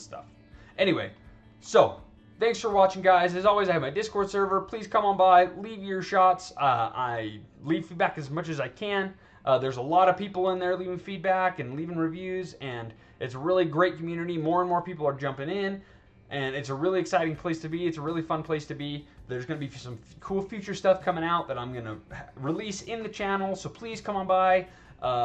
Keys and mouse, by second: 0.3 alt+right drag, 1.1-1.4 alt+drag.